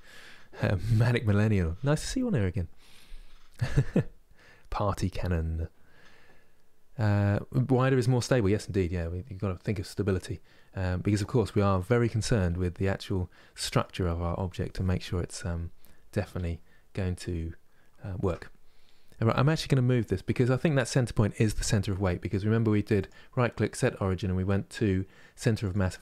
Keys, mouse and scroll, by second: 7.2 middle click, 7.8-8.1 scroll down 1, 8.1-16.6 middle drag, 16.6 scroll up 2, 18.0 Tab, 22.7-26.0 right drag.